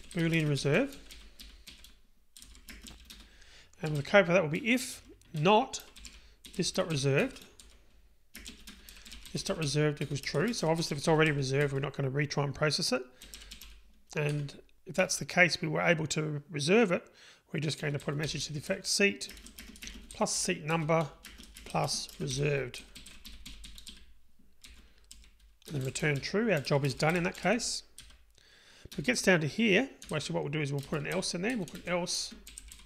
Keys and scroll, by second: 7.2 Return, 14.0 Return, 14.4 Tab, 20.8 Return, 31.2 Delete.